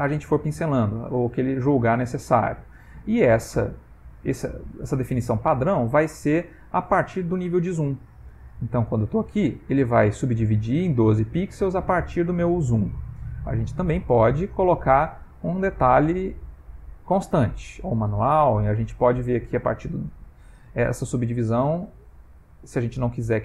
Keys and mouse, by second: 2.9 ctrl+middle click, 3.9 click, 4.9 ctrl+middle click, 5.5 click, 8.9 click, 12.1 click, 13.7 click.